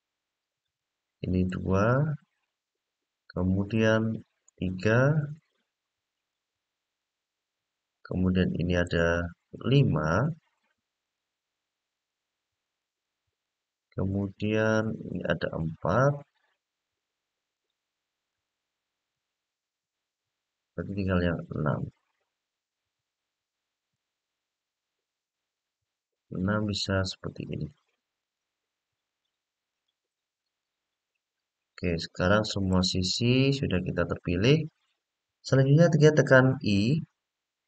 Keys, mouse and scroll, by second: 0.4 shift+click, 1.2 shift+click, 2.2-3.5 middle drag, 4.2 shift+click, 5.1 shift+click, 5.9 shift+click, 6.7-8.6 middle drag, 9.3 shift+click, 9.9 shift+click, 10.8 shift+click, 11.7 shift+click, 12.4 shift+click, 13.2-15.3 middle drag, 15.9 shift+click, 16.6 shift+click, 17.3 shift+click, 18.0 shift+click, 18.9-23.7 middle drag, 26.5 shift+click, 27.3 shift+click, 27.9 shift+click, 28.8 shift+click, 29.4 shift+click, 30.1 shift+click, 31.3-32.4 middle drag, 33.1-34.5 middle drag, 35.1-36.7 scroll up 1.